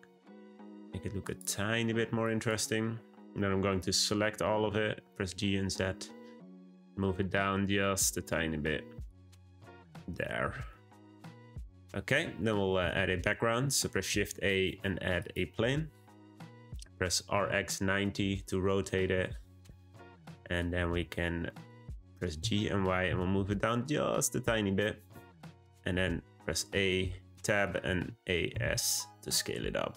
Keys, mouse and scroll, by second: 2.2 click, 4.6 g, 9.3 click, 9.7-13.4 shift+middle drag, 13.4 shift+a, 17.1 r, 20.1-20.7 middle drag, 20.7-21.5 scroll down 1, 21.5-22.3 middle drag, 22.3 g, 25.8 Tab, 26.9 middle click, 27.8 a, 28.5 s.